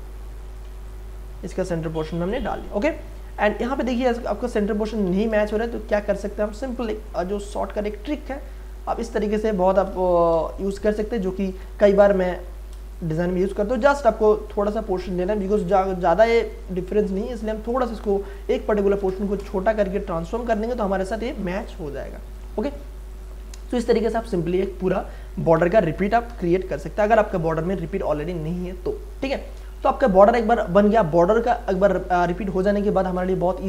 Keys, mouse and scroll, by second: 0.6 ctrl+space, 0.9 ctrl+click, 1.3 ctrl+space, 2.1 ctrl+space, 2.3-5.0 ctrl+drag, 5.6 m, 6.8 click, 8.0 space, 8.3 ctrl+click, 10.3 Left, 11.0 space, 11.2 click, 11.5 space, 11.8 ctrl+click, 12.2 ctrl+t, 12.7 ctrl+space, 12.9 ctrl+click, 13.3 ctrl+space, 15.4 click, 15.4-17.3 drag, 17.3 ctrl+space, 17.7-19.3 ctrl+drag, 19.3 Return, 20.2 ctrl+d, 20.6 ctrl+space, 20.9 ctrl+click, 21.1 ctrl+space, 21.5 ctrl+click, 21.6 ctrl+space, 22.3 ctrl+click, 22.4 ctrl+space, 23.0 click, 23.3 ctrl+space, 23.7 ctrl+click, 26.3 Delete, 27.2 ctrl+d, 29.8 space, 30.0-31.8 ctrl+drag, 31.8 v, 32.2 click.